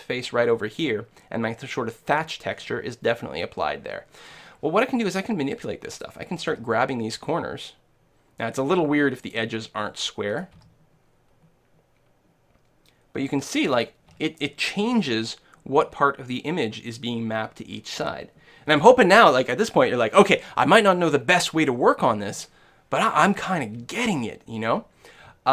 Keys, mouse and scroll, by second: 5.5-7.4 right drag, 6.5 g, 9.4-11.2 drag, 10.3-12.1 right drag, 10.6 g, 13.9-15.7 drag.